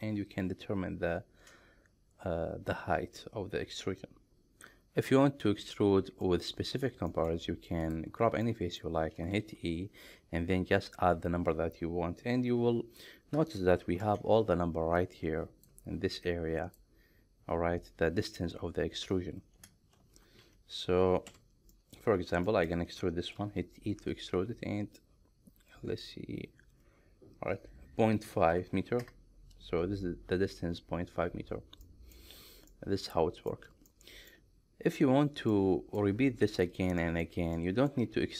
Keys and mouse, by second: 5.5 middle click, 6.6 middle click, 7.2 shift+middle click, 8.5-8.8 middle drag, 9.5 e, 13.9 ctrl+shift+3, 21.8 middle click, 22.5 shift+middle click, 23.4 e, 28.3 KP_Decimal, 28.6 KP_5, 29.1 KP_Enter, 31.9 middle click, 32.7 middle click, 33.9 middle click, 35.6 middle click, 37.1 shift+middle click, 37.7 middle click.